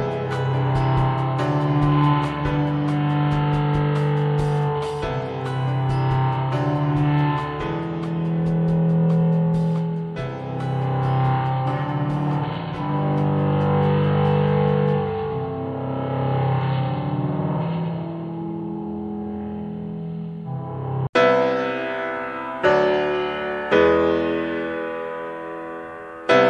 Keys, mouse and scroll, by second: 0.3-1.9 middle drag, 2.4 shift+click, 2.7 middle click, 3.5 click, 5.4-6.6 middle drag, 6.6 click, 7.2 click, 8.3 click, 10.4-13.9 middle drag, 13.9 click, 15.4 shift+click, 16.4 click, 18.2-19.6 middle drag, 19.6 click, 20.6 middle click, 21.1 click, 21.7-23.6 shift+middle drag, 23.6 shift+click, 24.2-25.4 middle drag, 25.4 click, 25.7 middle click, 26.1 Tab.